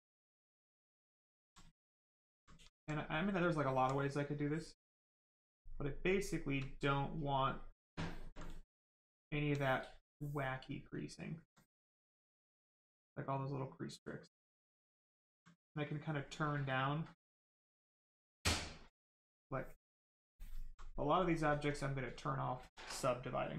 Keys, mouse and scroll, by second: 3.2 alt+right click, 4.9 click, 5.6 right click, 6.1 shift+right click, 6.7 alt+right click, 10.9 alt+click, 13.9 click, 15.2 alt+right click, 16.5 alt+right click, 16.6 alt+click, 17.8 click, 20.0 click, 20.6 alt+right click, 21.2 right click, 21.2 right click.